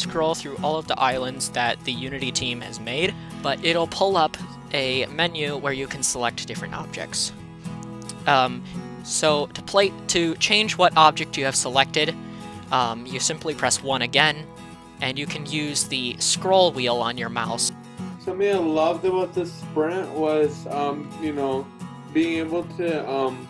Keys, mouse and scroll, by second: 9.0 w, 9.5 a, 13.6 1.